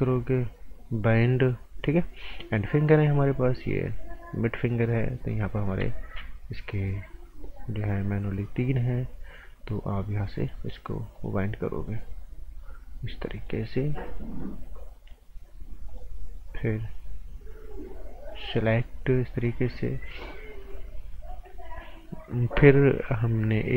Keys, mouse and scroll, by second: 10.3 click.